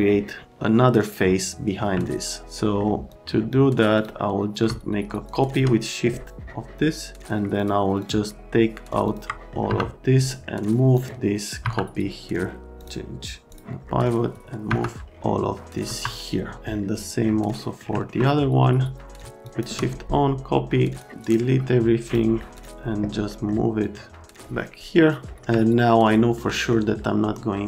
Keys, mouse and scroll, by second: 2.0 alt+right click, 3.1 middle click, 3.9 middle click, 5.3 shift+click, 7.6 ctrl+click, 8.0 ctrl+click, 9.0 middle click, 9.3 right click, 9.7 F3, 10.3 right click, 10.9 middle click, 11.6 F3, 12.7 click, 13.5 click, 13.9 middle click, 14.3 click, 14.7 F3, 15.9 F3, 17.6 middle click, 17.9 middle click, 19.2 click, 19.4 shift+click, 20.9 click, 21.2 click, 22.0 ctrl+click, 22.5 ctrl+click, 23.3 middle click, 23.8 click, 25.1 middle click, 25.6 alt+Pause, 26.5 alt+Pause.